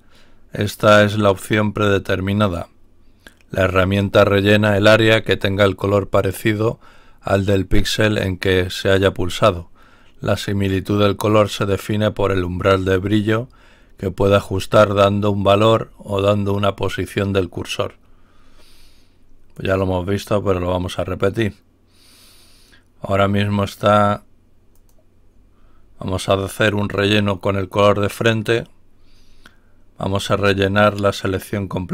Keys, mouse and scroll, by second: 19.4 click, 24.6 click.